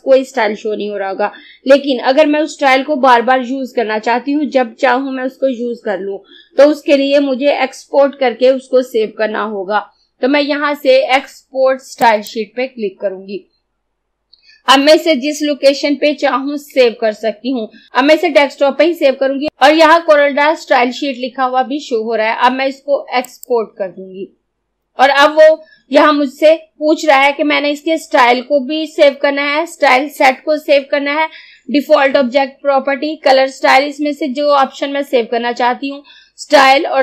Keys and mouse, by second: 12.1 click, 23.3 click.